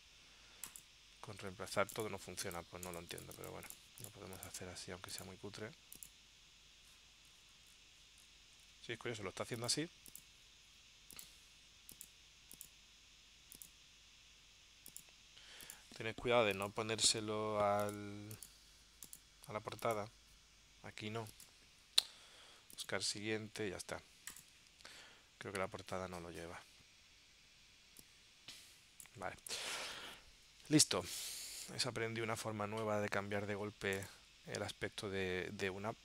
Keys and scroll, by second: 24.8 super+Tab, 29.5 super+Tab.